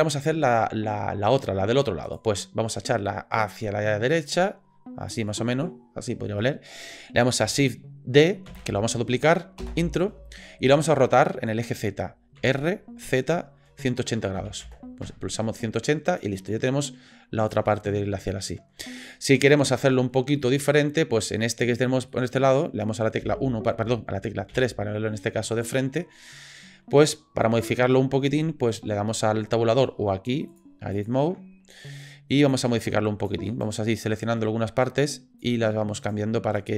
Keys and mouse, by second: 2.1 click, 3.5-5.1 drag, 5.3 middle click, 8.5 shift+d, 12.4 r, 16.2-17.5 drag, 17.7-19.1 middle drag, 20.4-20.7 shift+middle drag, 21.2 middle drag, 22.1-22.4 middle drag, 23.2 KP_1, 24.5 KP_3, 25.5-26.6 shift+middle drag, 30.6-31.0 drag, 32.5 click, 33.5 click, 34.2-35.4 drag, 36.0 click, 36.6 click.